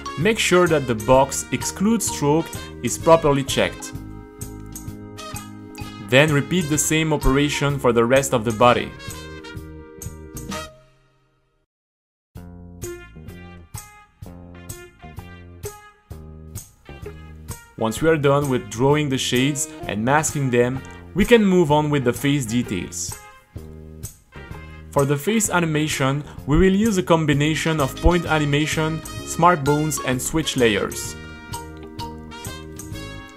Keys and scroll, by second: 3.8 super+r, 6.1 shift+h, 9.8 h, 10.2 Left, 16.4 super+r, 32.3 super+r, 33.2 a.